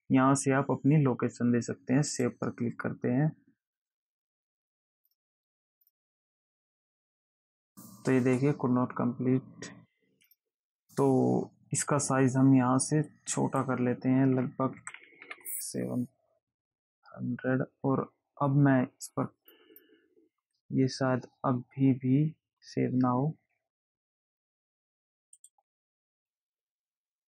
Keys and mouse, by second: 2.4 click, 5.3 click, 6.1 click, 10.5 click, 13.4 click, 19.7 click, 25.7 click.